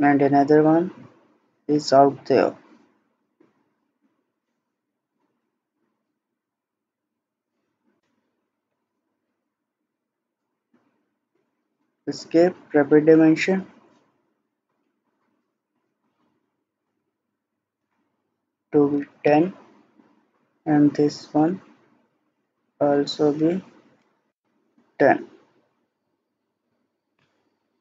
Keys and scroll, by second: 11.4 Escape, 18.7-19.5 typing, 24.0 typing, 24.3 Return, 25.7 Escape.